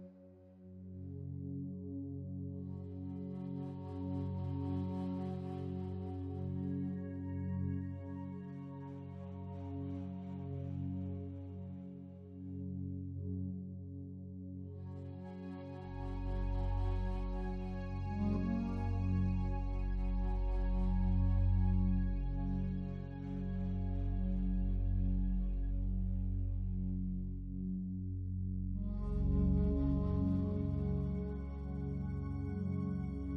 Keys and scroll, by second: 30.4 ctrl+t.